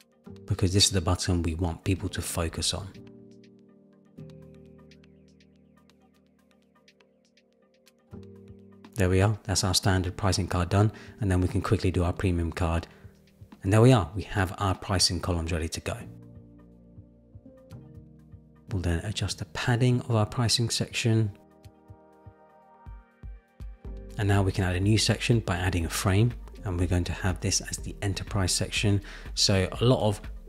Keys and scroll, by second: 2.8 super+v, 3.4 Return, 12.4 super+c, 12.8 super+v, 12.9 Return, 16.6 super+=, 21.4 shift+Down, 22.0 shift+Down.